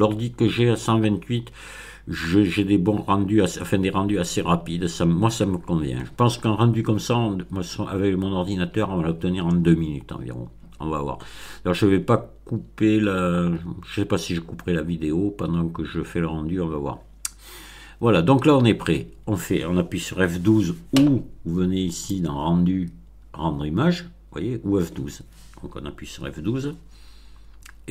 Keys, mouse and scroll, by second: 10.7-11.0 scroll up 2, 11.0 middle click, 11.3-11.6 scroll up 2, 12.4-12.8 scroll up 2, 13.7-14.8 scroll up 4, 21.9 click.